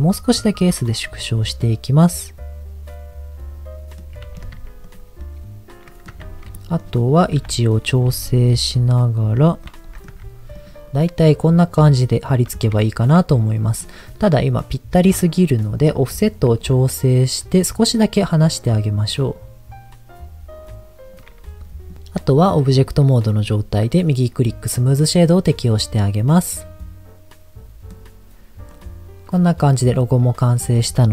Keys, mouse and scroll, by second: 1.1 click, 1.5-4.0 middle drag, 4.5 Tab, 4.8 click, 5.1 middle click, 6.1 Tab, 6.5 middle click, 7.3 KP_7, 8.1 g, 9.3 click, 9.7 middle click, 10.1 Tab, 10.5 click, 10.9-12.6 middle drag, 12.8 shift+middle click, 14.4-15.5 middle drag, 16.6-19.1 shift+drag, 19.3-21.1 shift+drag, 21.7 middle click, 21.9 scroll up 1, 22.1 scroll down 2, 22.6 click, 24.1-25.1 right drag, 25.3 click, 25.6-27.9 middle drag, 28.1-28.7 scroll down 1, 28.7 click, 30.4 click, 30.6-31.1 drag.